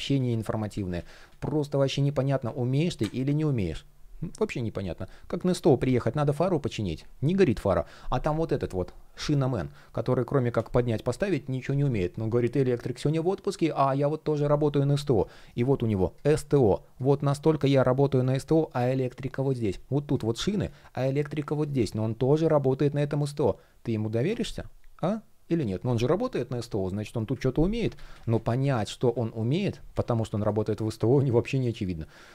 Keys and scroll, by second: 27.3 super+z.